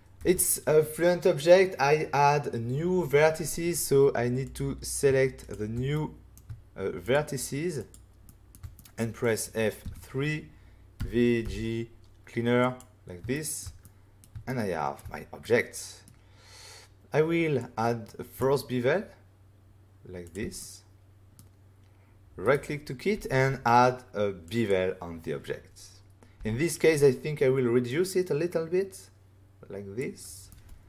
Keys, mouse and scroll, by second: 0.1 é, 4.4 click, 5.4 shift+click, 5.4 shift+click, 5.9 middle click, 7.0 shift+click, 7.8 shift+click, 8.2 shift+middle click, 8.5 middle click, 8.7 middle click, 9.8 F3, 10.9-11.4 typing, 12.6 click, 13.3 shift+middle click, 13.8 middle click, 14.4 shift+middle click, 15.4 middle click, 17.5 click, 20.2 click, 20.5 middle click, 22.4 right click, 23.1 f, 24.4 click, 26.3 f, 27.8 click, 30.4 middle click.